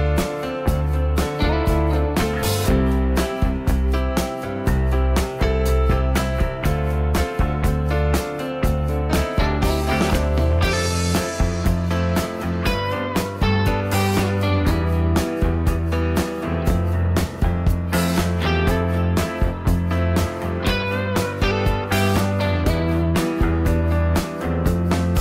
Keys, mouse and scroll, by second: 4.6 s, 9.9 m.